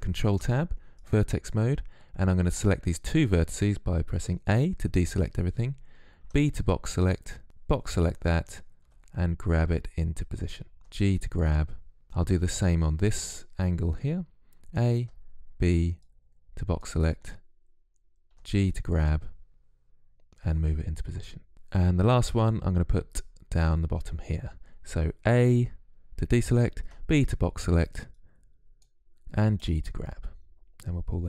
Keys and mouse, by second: 3.4 a, 5.2 b, 7.8 g, 13.5 a, 14.0 b, 17.2 g, 24.6 a, 26.2 b, 28.9 g.